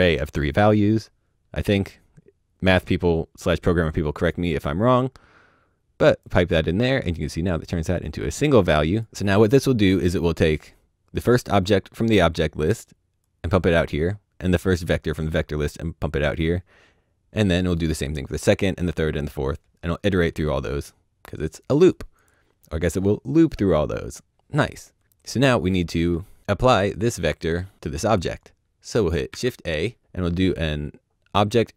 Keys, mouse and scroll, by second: 3.0 click, 8.5 click, 13.2 click, 20.8 click, 23.5 middle click, 25.6 middle click, 28.4 shift+click, 29.3 shift+a.